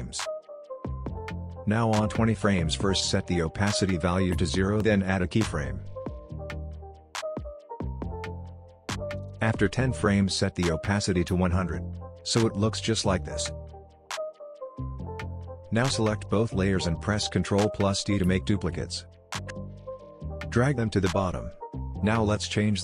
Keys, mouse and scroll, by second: 5.0-5.9 drag, 12.7 space, 15.3 click, 18.0 ctrl+d, 19.2-19.8 drag, 22.1-22.8 drag.